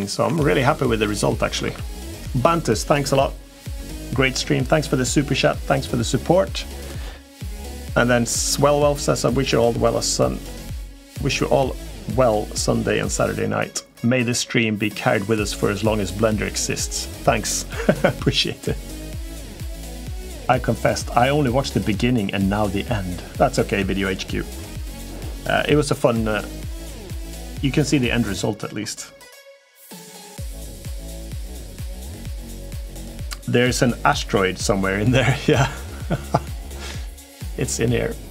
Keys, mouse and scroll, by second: 0.3 Tab, 0.3-0.8 middle drag, 1.4 ctrl+s, 36.8-38.0 middle drag.